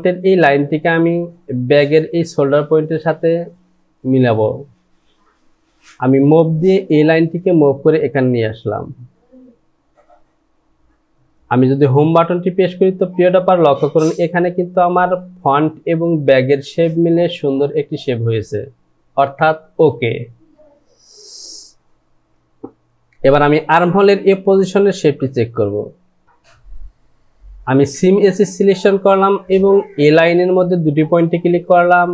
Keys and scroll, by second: 12.1 Home.